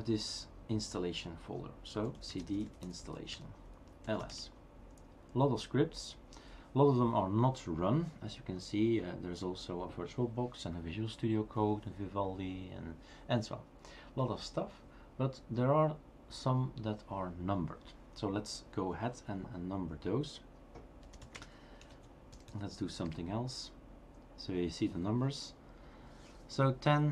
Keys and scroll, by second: 1.9-2.7 typing, 3.0 Tab, 3.3 Return, 4.2 typing, 20.8-21.7 typing, 24.1 typing.